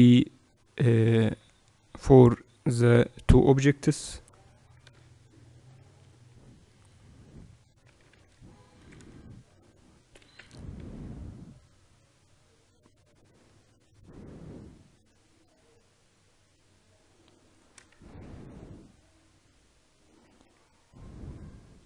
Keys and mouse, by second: 2.8 h, 3.8 KP_7, 4.9-6.2 middle drag, 6.6 right click, 7.4 click, 7.8 Tab, 8.0 right click, 8.0 z, 8.6 a, 8.8 a, 10.0 g, 17.9 Tab, 18.3-20.1 right drag, 20.1 Tab.